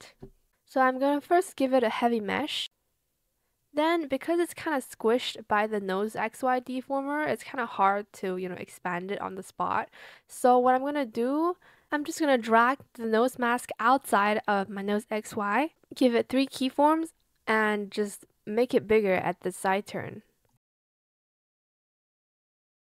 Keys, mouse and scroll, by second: 8.6 ctrl+z, 17.7 shift+click, 20.3 shift+click, 22.6 shift+click.